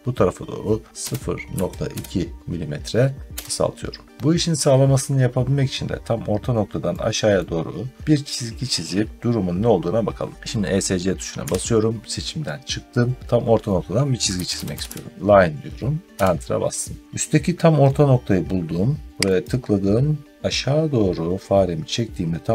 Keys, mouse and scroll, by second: 0.9-1.8 typing, 3.3 Return, 7.2 middle click, 7.5-7.8 scroll down 4, 10.5 scroll, 11.3 Escape, 12.5 scroll, 14.0-15.2 typing, 16.0 Return, 19.3 click.